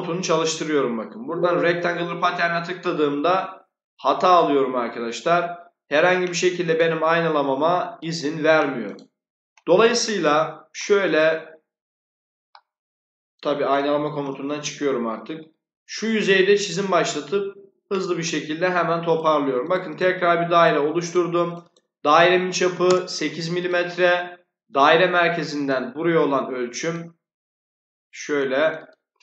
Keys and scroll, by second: 13.8 Escape, 22.5 8, 22.7 Return.